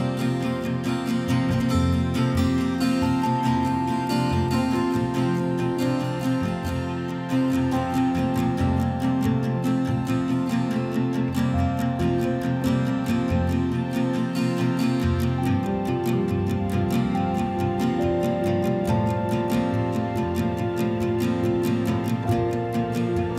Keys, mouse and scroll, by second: 0.9-3.5 right drag, 3.5 click, 4.4-5.2 a, 5.6-7.0 a, 7.0 right click, 8.3 click, 11.6 click, 12.9 q, 14.2-16.1 typing, 17.1 right click, 18.4 click, 19.0-20.1 typing, 21.5 click, 22.5 click.